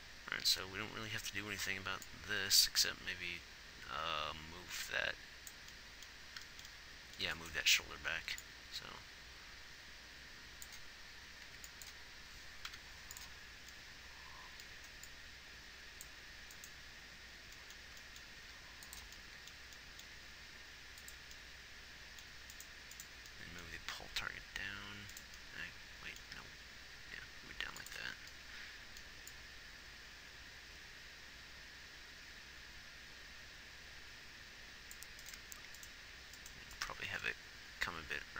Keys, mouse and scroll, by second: 9.7 click, 12.2 b, 13.5 i, 16.1 click, 18.8 g, 20.5 g, 24.2 g, 26.8 g.